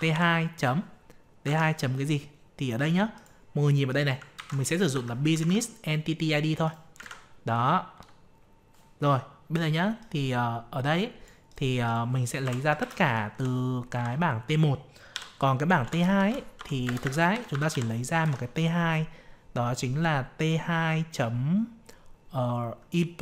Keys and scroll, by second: 1.4 alt+Tab, 4.3 ctrl+c, 5.3 alt+Tab, 7.0 ctrl+v, 18.2 alt+Tab.